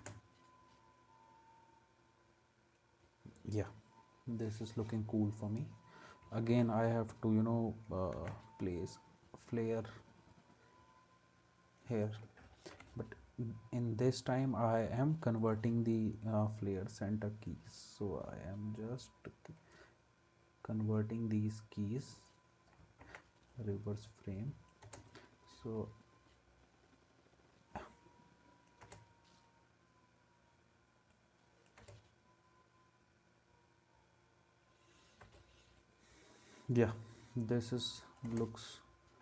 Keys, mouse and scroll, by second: 6.5 ctrl+s, 8.1 ctrl+d, 12.7 u, 23.0 ctrl+s, 24.8 space, 28.8 space, 31.8 space, 35.2 space, 38.3 space.